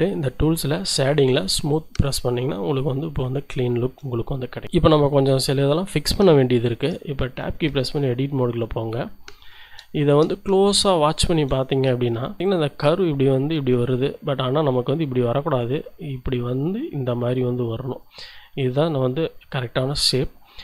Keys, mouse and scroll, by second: 0.2 click, 1.5 click, 3.3 shift+click, 3.5 shift+middle click, 4.2-4.6 shift+scroll up 4, 6.7 Tab, 7.8 shift+middle click, 8.0 shift+click, 9.5 Tab, 9.9 shift+click, 10.4-10.8 shift+scroll up 1, 11.0 shift+click, 11.7 shift+Tab, 12.2 shift+click, 12.4-14.9 drag, 12.4 d, 12.8 d, 15.7-18.2 drag, 18.6-20.6 drag.